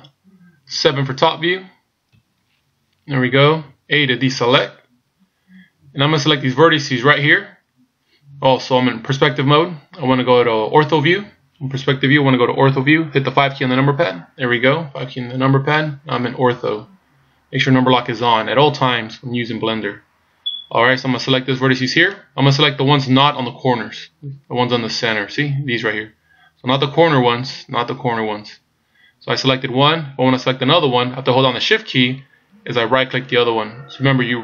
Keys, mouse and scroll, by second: 2.2 KP_7, 4.3 a, 5.0 scroll up 1, 14.0 KP_5, 15.2-17.2 scroll up 2, 22.0 right click, 33.2 shift+right click.